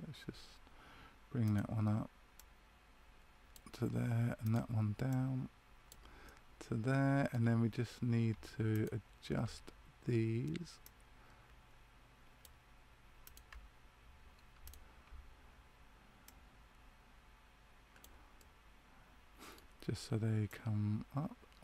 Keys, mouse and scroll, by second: 1.4 right click, 2.3 click, 4.4 right click, 5.0 click, 6.2 middle click, 8.6 shift+right click, 10.8 click, 13.2 right click, 14.6 shift+right click, 16.2 click, 18.3 middle click, 20.4 click.